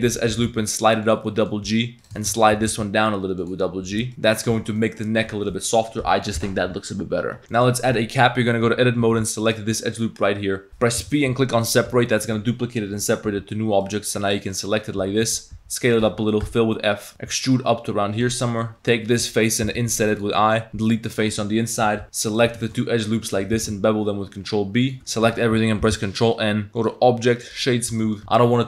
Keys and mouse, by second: 0.1 click, 0.3 g, 1.3 click, 2.0 alt+click, 2.2 shift+click, 2.6 g, 3.9 2, 4.1 g, 4.5 Tab, 4.8 drag, 5.5 click, 7.6 Tab, 7.6 click, 7.6 1, 8.3 Tab, 8.7 z, 9.1 z, 9.4 alt+click, 9.9 click, 10.7 p, 11.0 p, 11.9 Tab, 13.3 z, 13.9 click, 15.0 Tab, 15.2-17.2 typing, 16.3 click, 16.9 click, 18.3-22.6 typing, 18.4 click, 22.3 alt+shift+click, 22.6 shift+click, 23.2 click, 23.6 ctrl+b, 25.0 Tab, 25.0 a, 25.9 ctrl+n, 26.7 Tab, 26.8 click, 27.9 Tab, 28.0 click.